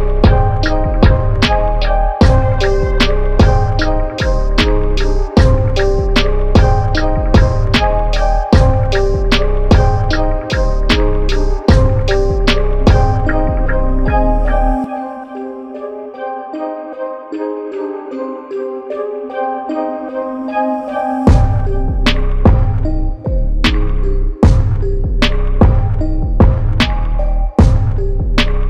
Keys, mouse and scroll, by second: 1.5 click, 4.3 click, 5.8 click, 6.5 KP_1, 6.8 KP_0, 7.9 click, 11.0 click, 13.3-14.8 typing, 13.5 Tab, 13.9 Tab, 16.5 click, 18.3 click, 20.0 click, 22.7 KP_5, 22.9 KP_0, 23.2 Tab, 24.7 click, 26.7 click, 28.6 KP_1.